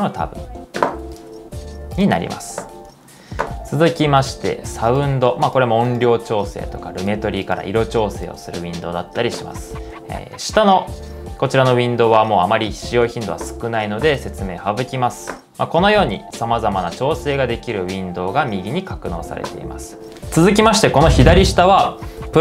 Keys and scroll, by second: 20.0 super+z.